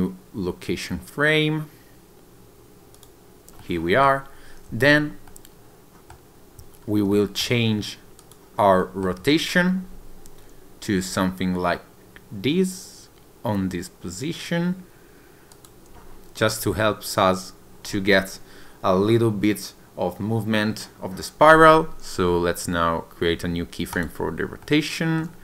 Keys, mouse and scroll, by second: 3.6 middle click, 5.3 middle click, 6.9 scroll down 1, 7.2 shift+middle click, 8.2 click, 8.8 shift+middle click, 9.3-9.7 scroll up 2, 11.0 r, 15.6 click, 24.7 middle click.